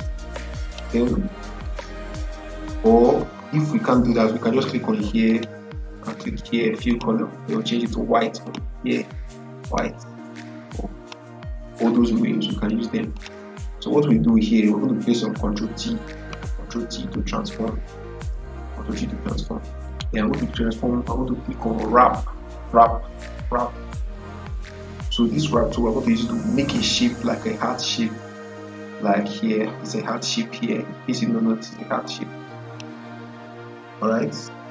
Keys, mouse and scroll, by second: 5.2 click, 10.9 click, 16.0 click, 16.3 ctrl+t, 19.8 right click, 23.9 click, 23.9 click, 28.5 click, 28.5 click, 32.5 click.